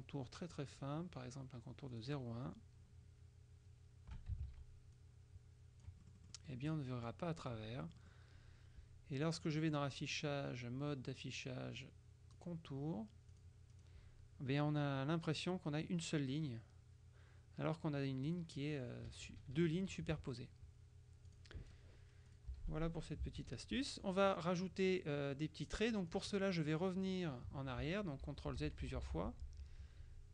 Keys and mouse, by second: 0.9 right click, 2.0 click, 4.5 ctrl+a, 5.1-7.1 ctrl+drag, 7.0 right click, 7.9 click, 9.5 click, 12.4 click, 13.4 click, 19.2 KP_Subtract, 21.4 click, 22.4 click, 22.6 Delete, 23.5 ctrl+KP_5, 24.4 click, 26.2 click, 27.9 ctrl+z.